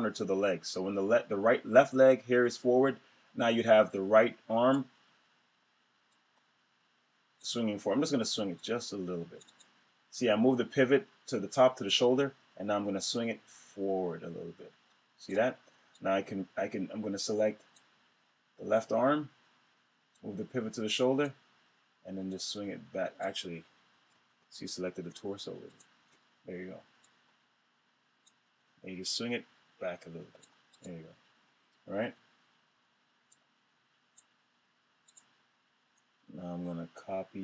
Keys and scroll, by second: 23.7 super+z.